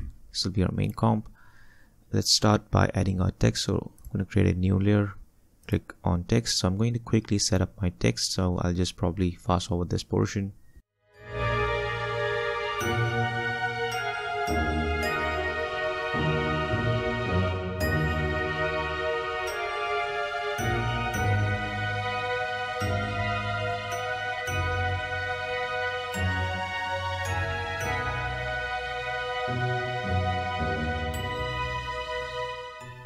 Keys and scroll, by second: 0.0-0.4 typing, 11.3 typing, 11.6 ctrl+a, 12.6 ctrl+d, 15.4-16.4 typing, 16.5 ctrl+a, 19.4 ctrl+d, 22.0-22.9 typing, 23.3 ctrl+d, 25.7-26.7 typing.